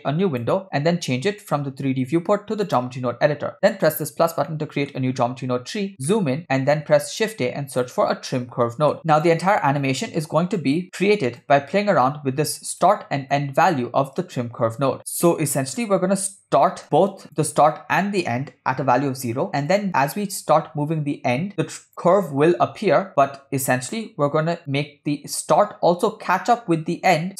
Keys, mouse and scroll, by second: 1.4-2.8 drag, 3.9 click, 4.5 middle click, 5.2-6.1 scroll up 8, 6.1 middle click, 6.9 shift+a, 10.6 click, 11.4-12.8 drag, 13.3-16.3 drag, 16.8 click, 19.7-21.9 drag, 23.1 click, 24.6-27.3 drag.